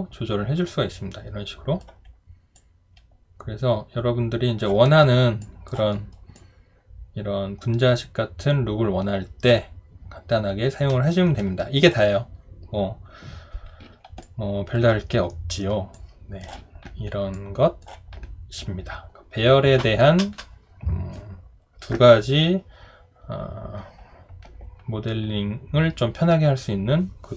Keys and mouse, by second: 5.4 alt+click, 5.9 alt+right click, 6.3 alt+click, 14.2 alt+click, 15.3 alt+middle click, 15.9 alt+click.